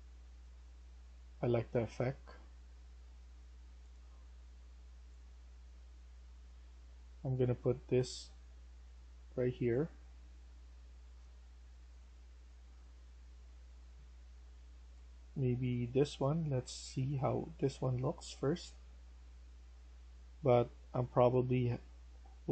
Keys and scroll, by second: 0.2-1.0 typing.